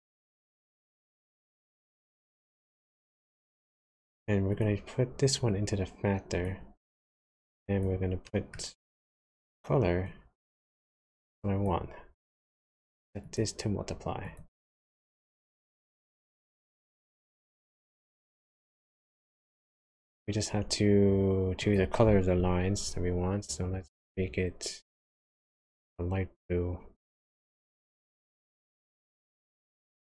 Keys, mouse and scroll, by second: 5.5 click, 6.9 click, 8.3 middle click, 9.1 middle click, 10.0 click, 13.2 click, 15.0 click, 17.5 ctrl+shift+click, 18.5 click.